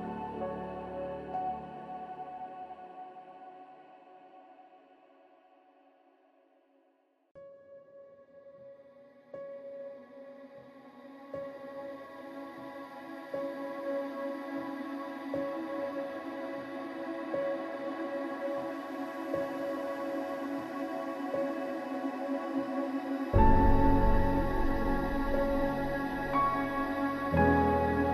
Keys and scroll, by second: 1.4 ctrl+-, 2.4 ctrl+-, 3.0 ctrl+-, 3.9 ctrl+=, 4.1 ctrl+=, 4.4 ctrl+=, 4.8 ctrl+=, 14.7 ctrl+0.